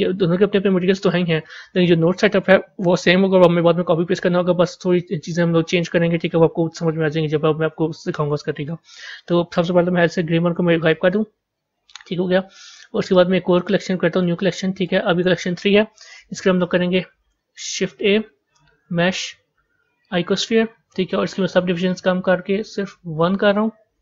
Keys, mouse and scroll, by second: 10.7 click, 13.0-14.6 right drag, 14.6 click, 17.7 shift+a, 21.7-24.0 drag.